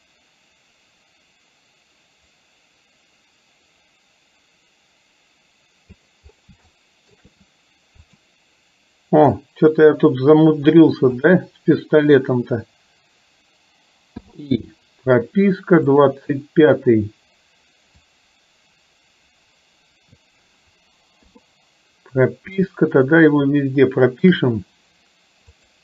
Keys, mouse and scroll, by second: 6.8-7.2 shift+middle drag, 8.2 click, 9.6-11.3 drag, 14.3 i, 16.0 click, 18.2-20.3 drag, 22.7-24.3 shift+middle drag, 25.6 click.